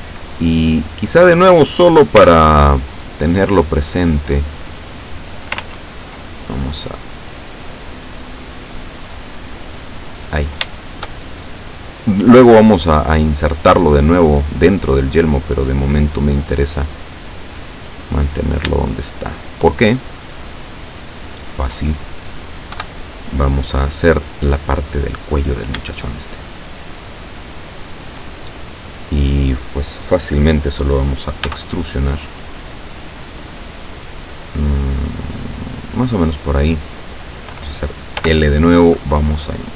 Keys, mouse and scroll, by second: 1.1 right click, 2.2 l, 3.0-4.4 drag, 5.0 click, 5.6 ctrl+z, 6.6-10.6 ctrl+drag, 10.8 shift+middle click, 11.7 middle click, 12.9-13.9 middle drag, 15.3-16.2 middle drag, 17.1 click, 18.4 right click, 19.3 shift+right click, 21.2 shift+right click, 22.8 KP_7, 24.8-25.8 middle drag, 27.9 shift+right click, 28.6 shift+middle click, 31.5 e, 36.0 click, 38.3 l, 39.2-39.7 drag.